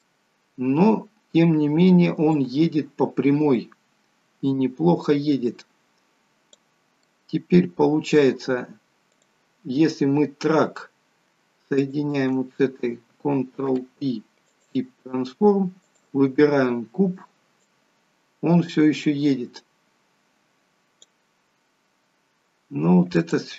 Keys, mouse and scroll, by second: 0.4 scroll down 2, 1.4 scroll down 2, 2.5 click, 7.2 middle click, 7.2 scroll up 1, 8.0 scroll up 1, 9.4 click, 10.5-11.0 scroll down 2, 11.9 shift+click, 13.8 ctrl+p, 16.0 click, 17.8 click, 21.6-22.0 scroll up 3, 22.2 scroll down 1, 23.3 click.